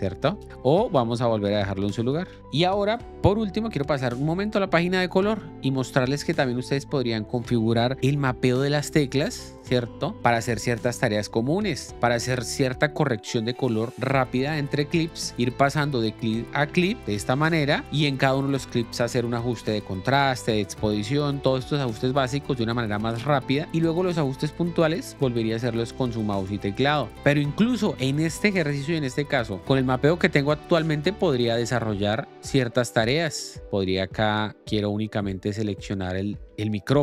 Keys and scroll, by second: 0.2 k, 8.2 alt+s, 10.1 alt+Tab, 17.0 Up.